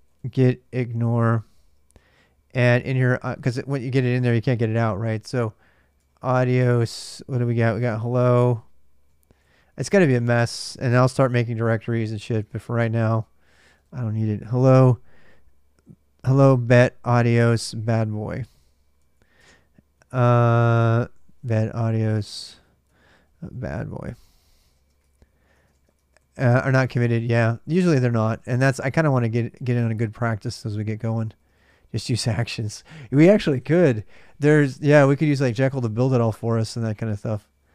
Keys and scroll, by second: 0.0-3.7 typing, 1.7 Return, 5.8 Return, 6.6 ctrl+[, 6.6 ctrl+j, 6.7-13.8 typing, 7.7 ctrl+[, 8.2 Return, 10.2 Return, 13.3 ctrl+[, 13.4 ctrl+j, 17.7 ctrl+[, 17.8-26.5 typing, 19.2 Return, 26.8 ctrl+[, 26.8 ctrl+j, 28.0-32.1 typing.